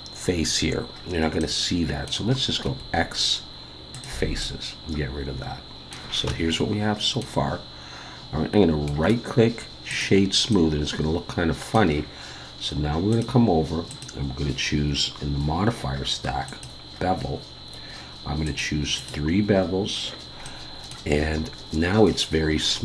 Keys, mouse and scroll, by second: 1.0-1.4 scroll down 1, 1.4 middle click, 2.6 x, 4.4 middle click, 6.3 Tab, 6.5 middle click, 8.9 right click, 10.5 middle click, 13.1 click, 13.9 click, 18.4 click, 19.0 click, 20.4 middle click, 21.1-22.0 scroll up 2, 22.1-22.6 scroll down 2, 22.6 middle click.